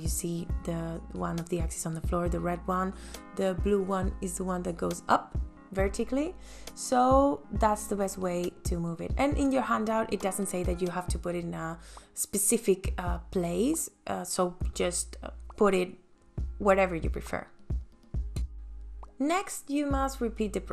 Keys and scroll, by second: 5.0 space.